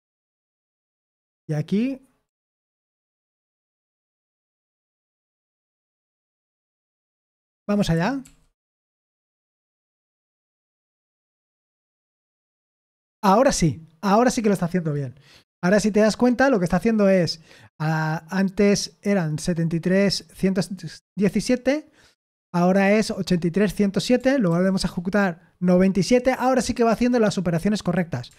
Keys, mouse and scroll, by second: 0.0-7.9 typing, 8.2 ctrl+p, 8.7 Return, 11.4 ctrl+p, 12.2 Return, 24.5 ctrl+p, 24.8 Return.